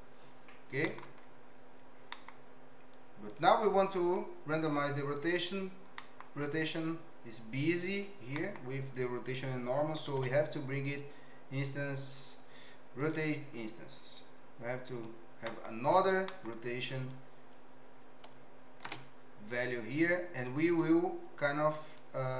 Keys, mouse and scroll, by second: 0.9 middle click, 2.2 middle click, 3.0 click, 3.8 click, 5.1 click, 5.9 middle click, 8.4 middle click, 10.0 shift+a, 15.4 middle click, 16.2 middle click, 18.8 shift+d, 20.4 click, 20.6-22.0 drag.